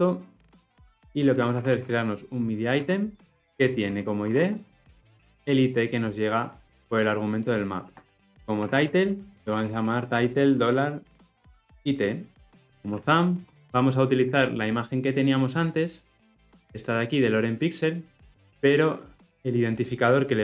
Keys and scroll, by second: 3.4 Return, 13.4 Return.